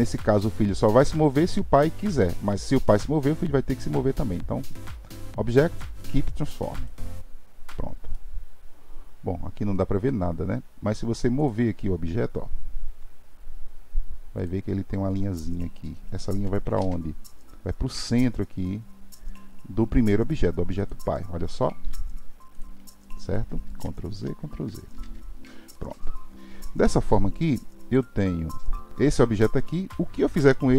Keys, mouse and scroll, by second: 8.1-11.1 middle drag, 11.4 click, 12.8 g, 16.8 alt+z, 20.8 click, 23.9 ctrl+z, 24.2 ctrl+z, 25.7-27.9 middle drag, 27.9 click.